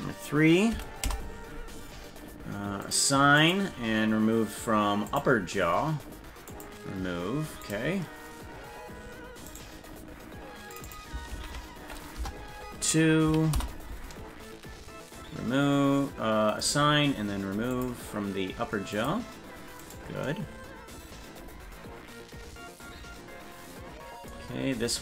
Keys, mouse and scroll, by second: 2.8 click, 3.4 click, 5.1 click, 6.5 click, 7.7 click, 9.5 right click, 10.7-14.1 drag, 16.5 click, 17.7 click, 18.9 click, 19.8 right click.